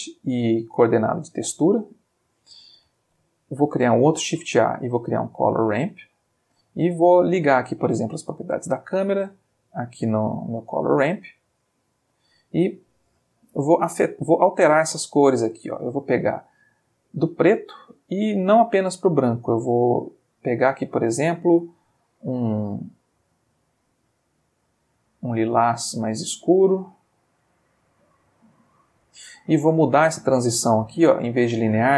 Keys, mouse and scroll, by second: 1.3 click, 2.1 click, 3.0 shift+a, 5.6 click, 6.4 click, 7.1 click, 8.4-9.9 drag, 10.1-10.9 drag, 11.4-12.4 drag, 15.6-16.9 drag, 17.6-18.6 drag, 18.7-19.7 drag, 20.0 click, 20.9-22.1 drag, 22.6-26.5 drag, 26.8-29.1 drag, 30.5 click, 31.8 click.